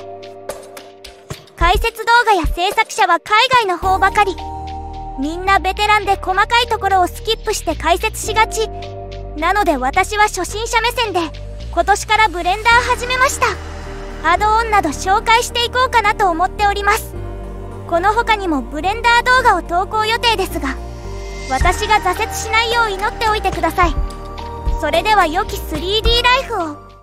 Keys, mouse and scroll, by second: 0.0-3.6 drag, 4.4 click, 5.2 click, 8.8 click, 10.3-13.2 middle drag, 13.9 click, 15.2-16.7 right drag, 17.4 click, 18.2 click, 20.6 g, 22.0 click, 23.4 middle click, 23.6 middle click, 24.9 click, 26.9 click.